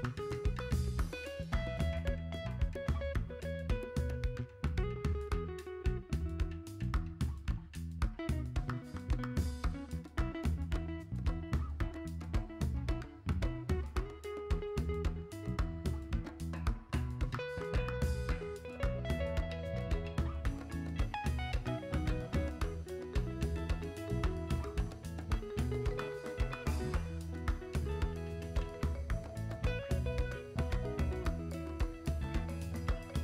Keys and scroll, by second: 12.0 s, 17.5 s.